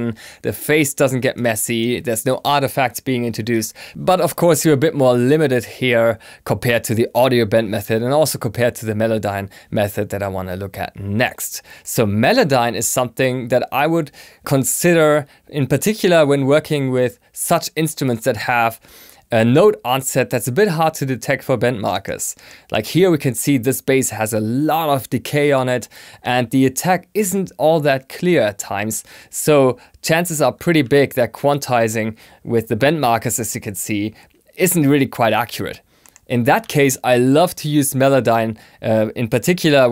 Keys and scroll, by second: 30.8 q.